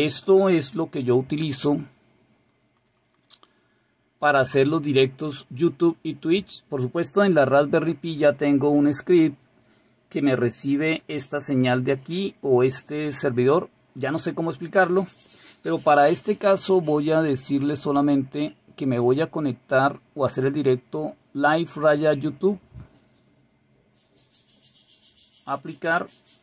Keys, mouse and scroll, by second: 2.3 BackSpace, 17.3 Delete, 25.5 click.